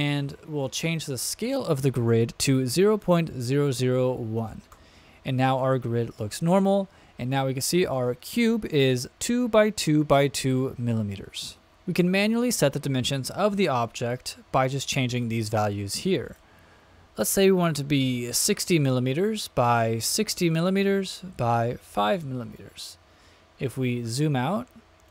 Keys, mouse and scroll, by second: 3.7 KP_0, 16.2-19.2 drag, 19.4-21.0 drag, 21.2-22.8 drag, 23.5-25.1 scroll down 7.